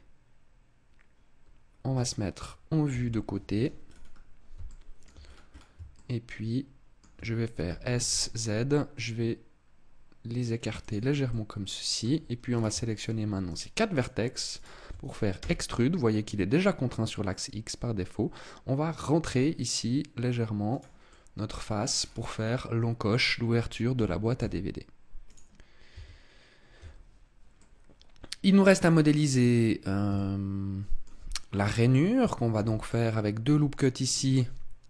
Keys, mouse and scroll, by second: 2.8 KP_3, 3.8-4.4 scroll down 4, 4.6 shift+middle click, 5.2-5.8 scroll up 7, 5.9 shift+middle click, 7.6 s, 10.9 click, 11.2 middle click, 12.5 right click, 12.8 shift+right click, 13.4 right click, 13.8 shift+right click, 14.5 shift+right click, 15.3 e, 21.0 click, 21.0 middle click, 21.9-22.2 scroll down 5, 23.9 g, 25.4 click, 25.8 Tab, 26.7 Tab, 27.5 middle click, 30.1 shift+middle click, 32.5 ctrl+r, 34.0 click.